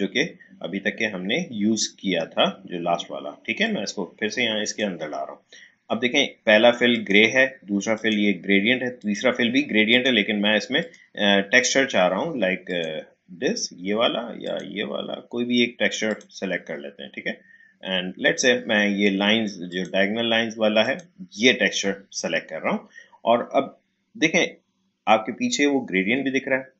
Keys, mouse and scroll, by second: 3.6-6.9 drag, 19.7 click.